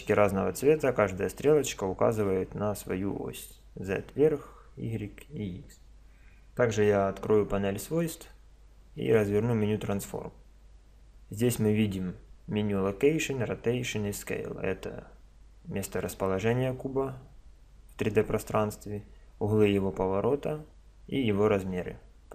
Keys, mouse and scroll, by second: 6.7 n, 9.0 click, 10.6 middle click, 10.6 click, 10.7 middle click.